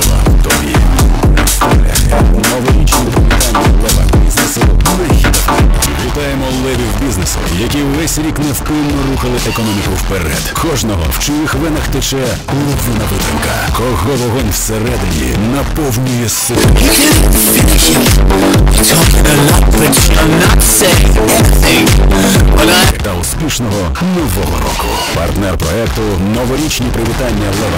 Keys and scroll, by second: 5.9 Page_Down, 22.8 Page_Down.